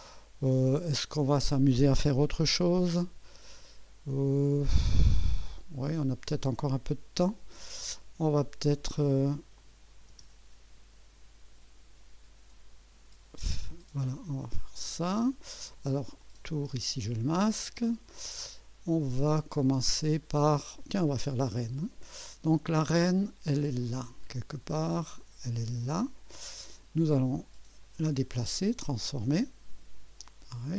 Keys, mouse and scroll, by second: 2.5 1, 3.6 2, 4.5 right click, 9.6 click, 10.1 space, 13.7 click, 14.4 space, 16.2 click, 16.6 space, 18.1-19.0 right drag, 19.1 scroll down 1, 25.9 click, 27.8 right click, 28.5 click, 30.2-30.7 drag.